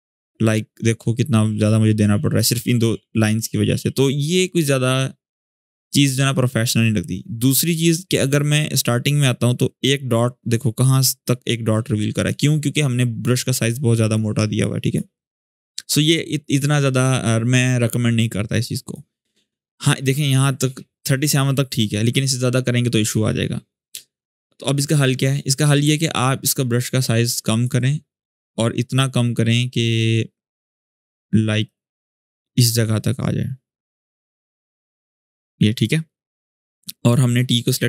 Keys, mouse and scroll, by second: 8.3 click, 8.6-12.0 drag, 13.0-14.8 drag, 16.3-18.8 drag, 19.4-19.7 scroll up 1, 25.6 scroll up 1, 25.7-27.6 ctrl+drag.